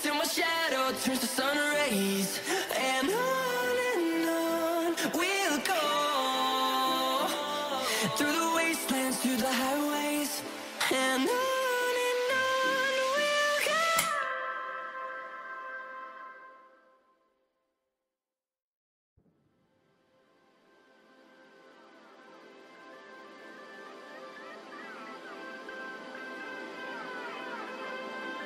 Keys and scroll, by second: 20.9 ctrl+z, 21.7 space, 22.1 Delete, 23.4 space, 27.0 shift+Page_Down, 27.5 Escape.